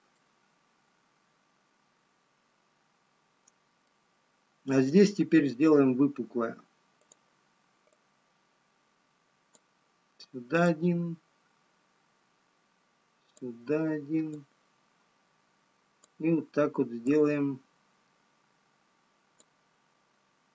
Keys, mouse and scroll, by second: 0.1 click, 0.1-0.5 scroll down 2, 1.2 middle click, 10.1-20.5 click.